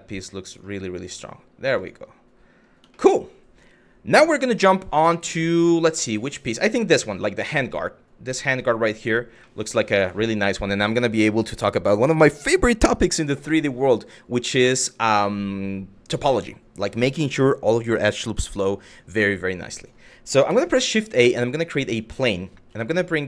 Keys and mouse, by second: 0.8 Tab, 2.5 shift+middle drag, 9.1 shift+middle drag, 19.4 click, 20.2 shift+a, 22.3 g.